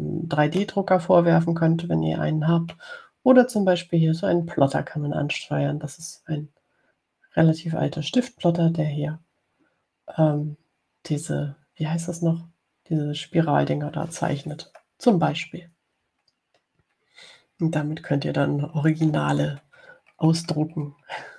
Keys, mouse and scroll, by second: 1.8-3.3 drag, 3.3 middle click, 15.8-16.1 scroll down 2, 16.9 scroll down 2, 17.6-17.9 ctrl+scroll down 2, 18.3 ctrl+scroll down 2, 19.7 ctrl+scroll down 2, 21.1-21.3 scroll down 2.